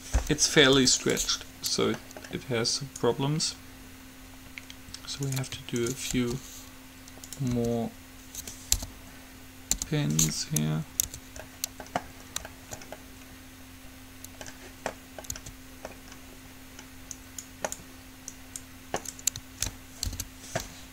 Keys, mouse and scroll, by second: 0.9 u, 2.9 right click, 3.5 click, 4.0 right click, 6.0-7.9 right drag, 6.3 g, 7.7 r, 9.0 p, 10.0 u, 11.3 Tab, 11.6 middle click, 15.6 Tab, 17.3-20.3 right drag, 20.3 alt+p.